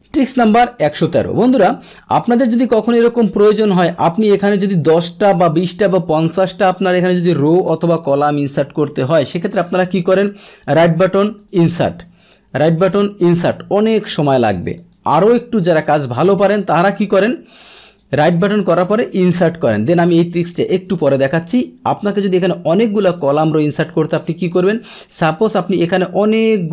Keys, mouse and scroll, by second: 1.9-2.6 scroll down 2, 2.6-4.2 scroll up 2, 4.2-5.8 drag, 6.3 click, 8.0-9.3 drag, 9.5 click, 10.5-11.4 right drag, 11.4 click, 12.5 right click, 13.2 click, 14.7 click, 17.8 click, 18.2-18.9 right drag, 19.0 click, 21.0 click, 22.4 click, 23.3 click, 24.5-26.7 drag.